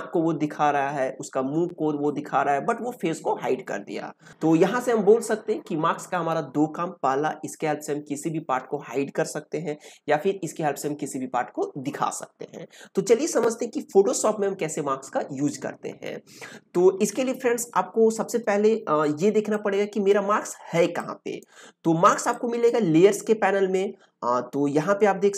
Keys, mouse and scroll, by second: 19.5-25.3 drag.